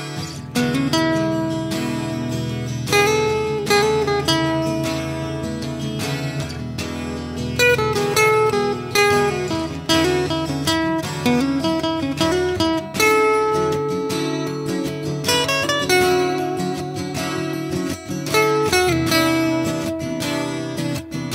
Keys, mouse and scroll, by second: 0.9 s, 1.5 s, 1.9-3.0 middle drag, 2.0 s, 3.8 s, 4.2 s, 4.6 middle click, 4.6 s, 5.1-7.0 drag, 7.0 middle drag, 7.2 click, 7.5 ctrl+KP_Subtract, 8.9 a, 9.5 s, 9.7 click, 10.5 s, 13.7-14.4 drag, 16.4-20.5 drag, 20.7 a.